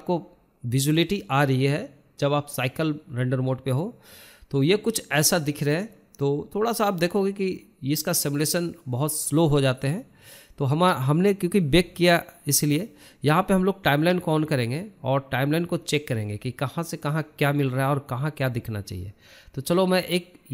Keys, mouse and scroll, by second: 9.9-10.9 drag, 10.9 shift+middle click, 11.4-15.9 drag, 15.9-17.0 shift+middle drag, 17.0 click, 18.2-20.1 drag.